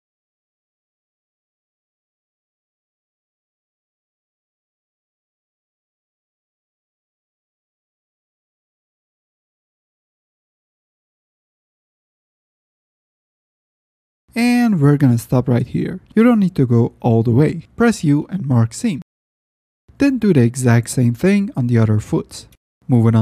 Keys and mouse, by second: 1.1 click, 1.1 right click, 2.2 click, 2.2 right click, 3.1 ctrl+shift+z, 3.8 click, 3.8 right click, 4.5-5.0 middle drag, 5.5 ctrl+shift+z, 5.9 middle click, 6.3 middle click, 6.8 middle click, 7.4 ctrl+shift+z, 7.6 ctrl+shift+click, 8.8 shift+drag, 9.3 click, 9.5 right click, 9.9-10.4 drag, 9.9-10.4 right drag, 11.4 shift+click, 11.8 middle click, 12.6 middle click, 14.6-15.5 middle drag, 16.0-16.4 middle drag, 16.8-18.1 drag, 16.8-18.1 right drag, 18.6 u, 19.8 click, 19.8 right click, 20.1 middle click, 20.8 middle drag, 21.4 ctrl+shift+drag, 21.8 middle click, 22.7 F9, 23.0 drag.